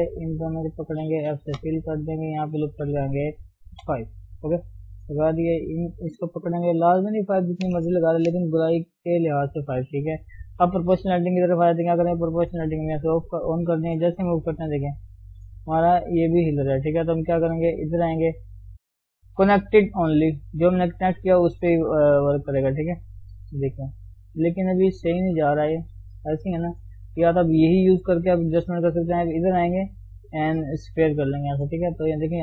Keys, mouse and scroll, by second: 0.7 shift+click, 1.6 f, 2.7 ctrl+r, 5.4 click, 6.7 KP_3, 10.6 scroll down 1, 12.8 click, 14.2 g, 31.3 click, 31.9 g.